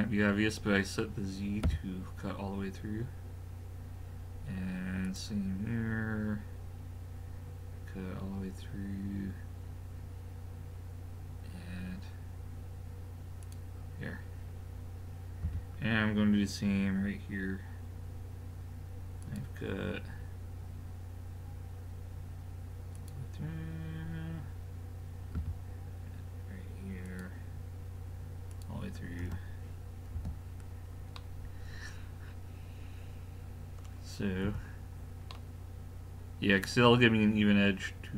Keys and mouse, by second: 30.2 a, 31.9-33.2 middle drag, 34.4 KP_5, 35.3 middle click.